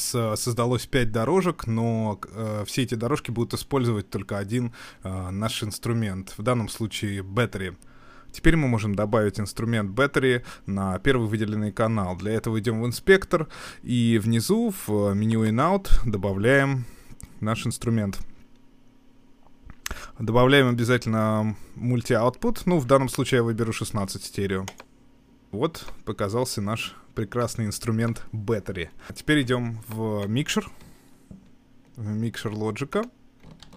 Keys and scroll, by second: 33.6 super+2.